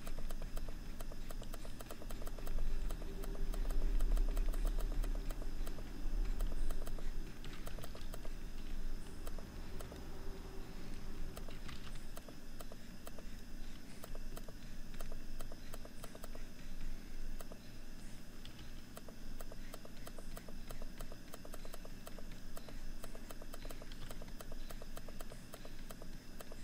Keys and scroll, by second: 7.2 ctrl+-, 9.0 ctrl+-, 11.1 ctrl+=, 14.3 ctrl+=, 18.0 ctrl+-, 19.7 ctrl+-.